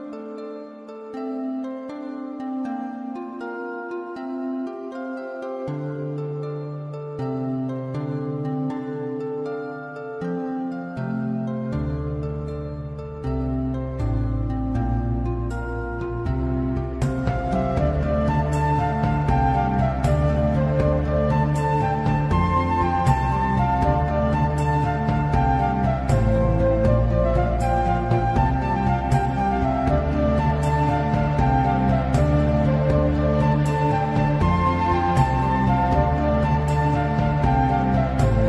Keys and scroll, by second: 0.9 w, 1.8 1, 3.4 2, 5.0-7.9 typing, 14.9 s, 17.2 m, 17.4 n, 18.7 w, 19.1 a, 23.3 s, 23.7 d, 24.9 n, 25.6 s, 26.6-27.9 typing, 29.6-30.5 typing, 32.1 s, 34.0 s, 35.6 q.